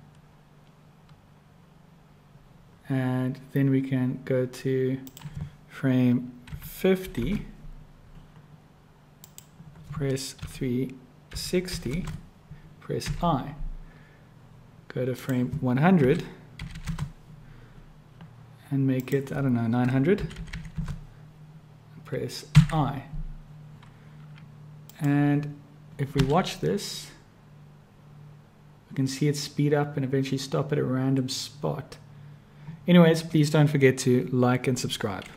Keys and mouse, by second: 5.1-8.3 drag, 9.2-14.4 drag, 13.1 1, 15.2-17.8 drag, 16.7 0, 19.0-23.6 drag, 20.5 0, 22.6 i, 24.8 click, 26.3 space.